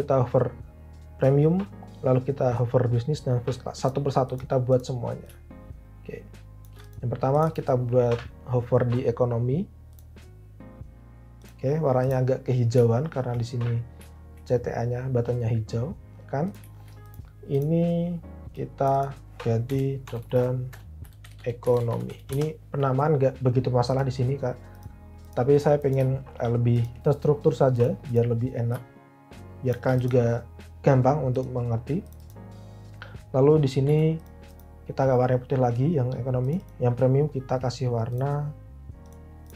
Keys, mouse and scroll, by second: 19.8 Right, 20.0-22.5 typing, 33.9 i.